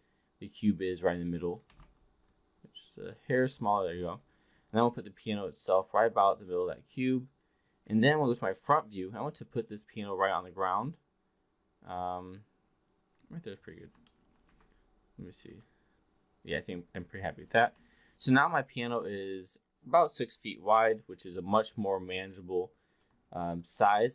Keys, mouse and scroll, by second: 1.6 e, 2.2-3.6 drag, 2.2 r, 3.7 w, 4.2-6.8 drag, 7.7 v, 9.8-13.2 drag, 14.1 alt+middle click, 15.3 v, 15.4 f, 17.8-18.1 alt+drag, 19.0-19.4 drag, 20.2 Delete, 21.9-22.4 alt+drag, 23.0 alt+middle drag, 23.6 alt+click.